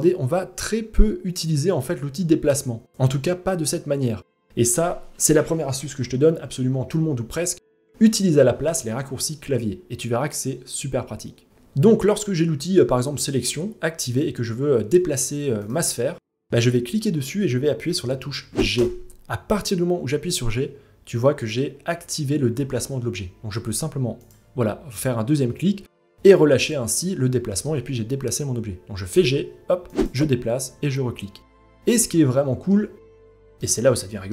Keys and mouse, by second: 7.2 click, 15.2 click, 18.4 g, 26.3-27.2 middle drag, 28.7 g, 30.7-31.0 middle drag, 32.0-32.3 ctrl+middle drag, 32.6 ctrl+middle drag, 33.2 ctrl+middle drag, 33.7 ctrl+middle drag, 34.2 middle drag.